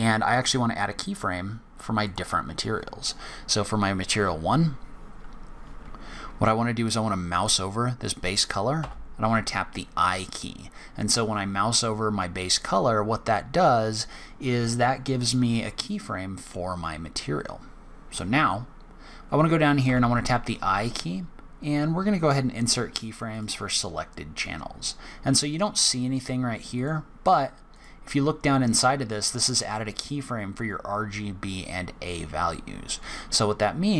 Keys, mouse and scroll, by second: 2.0 click, 19.2 right click, 26.7 click, 27.7 click.